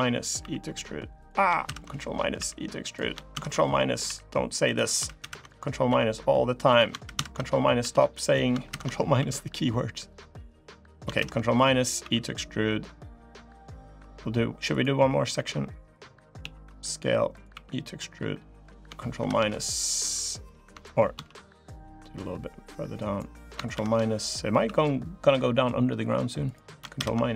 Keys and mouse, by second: 0.2 e, 1.4 ctrl+KP_Subtract, 2.1 e, 3.1 ctrl+KP_Subtract, 3.8 e, 5.0 ctrl+KP_Subtract, 5.6 e, 6.9 ctrl+KP_Subtract, 7.6 e, 8.4 ctrl+KP_Subtract, 8.9 e, 10.9 ctrl+KP_Subtract, 11.8 e, 15.1 e, 16.2 s, 17.3 e, 18.9 ctrl+KP_Subtract, 20.9 ctrl+z, 21.8-23.0 drag, 23.5 ctrl+KP_Subtract, 24.4 e, 26.7 ctrl+KP_Subtract.